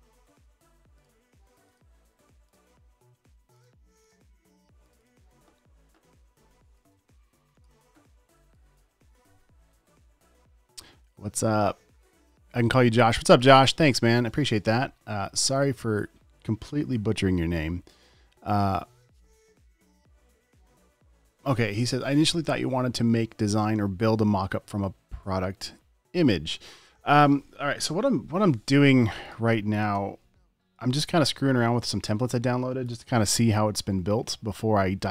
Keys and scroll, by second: 28.2 Return, 30.2 Return, 31.1 super+s.